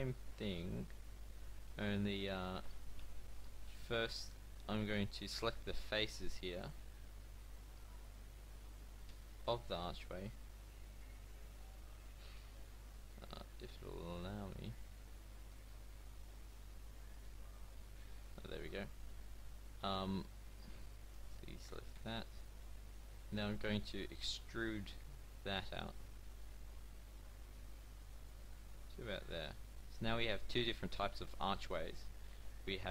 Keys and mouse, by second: 0.0-2.4 middle drag, 2.4 e, 8.8-13.2 drag, 18.7 middle click, 20.8 c, 24.7 e, 28.6 middle click, 29.4 Tab, 32.7 Tab.